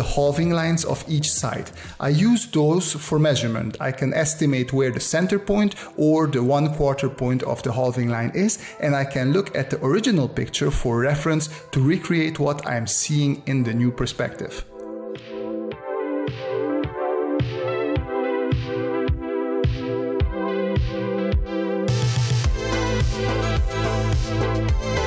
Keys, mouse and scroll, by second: 21.9 click.